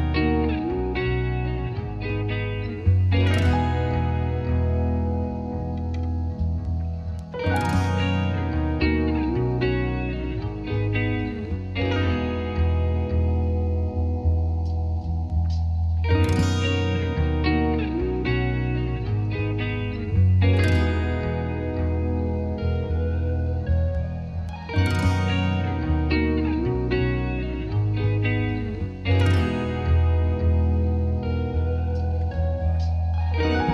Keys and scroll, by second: 26.7-27.7 typing, 27.8 Return.